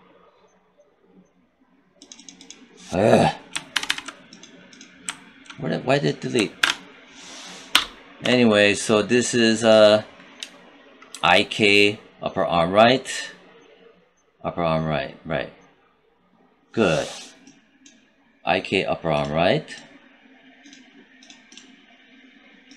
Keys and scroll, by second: 3.6 ctrl+c, 6.5 ctrl+v, 7.8 BackSpace, 11.0 shift+i.